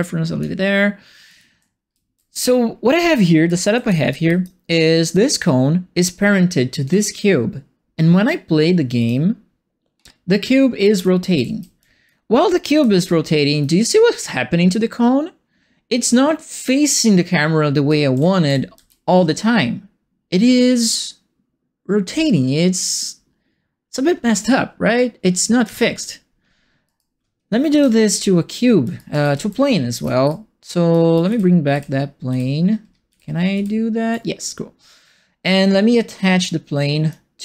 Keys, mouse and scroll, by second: 1.1-4.5 typing, 1.2-4.4 right drag, 5.2 click, 6.9 click, 8.9 click, 9.9 middle click, 9.9 scroll, 10.5-13.3 typing, 17.6-19.2 typing, 25.6 Escape, 26.8 right click, 27.7 shift+Escape, 28.5-30.5 typing, 28.9-30.2 right drag, 30.9 right click, 31.2 ctrl+z, 31.7 ctrl+z, 33.0 ctrl+z, 33.5 ctrl+z, 36.7 click.